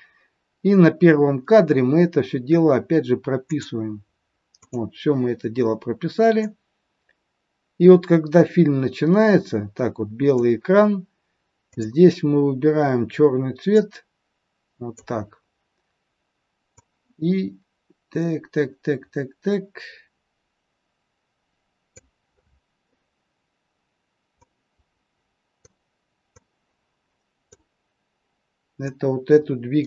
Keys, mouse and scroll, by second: 3.5 click, 4.6 click, 6.4 click, 11.5 click, 16.7 click, 24.3 click, 26.3 click, 28.8 click.